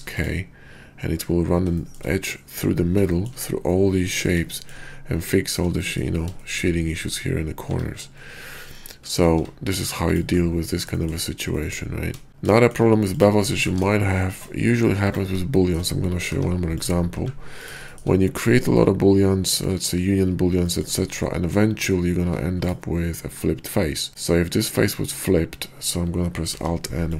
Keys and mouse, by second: 7.9 middle click.